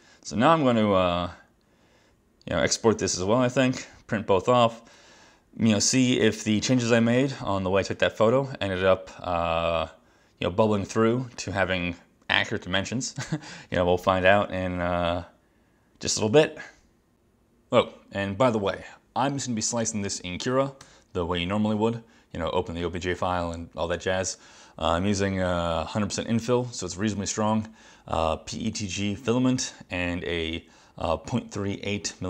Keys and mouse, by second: 21.0 super+Right.